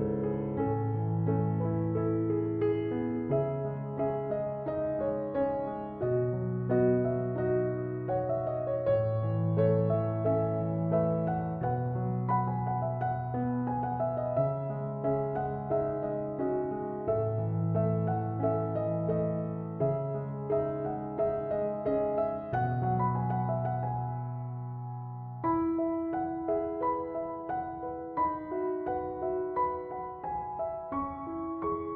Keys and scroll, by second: 11.9-12.6 typing.